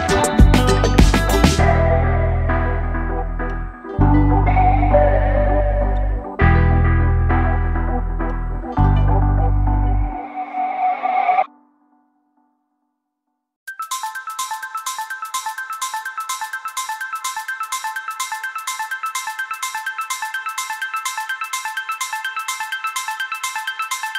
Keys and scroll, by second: 7.6 ctrl+shift+g, 10.7-12.5 typing, 13.0 ctrl+j, 17.5 Delete, 18.7 \, 20.0 Delete.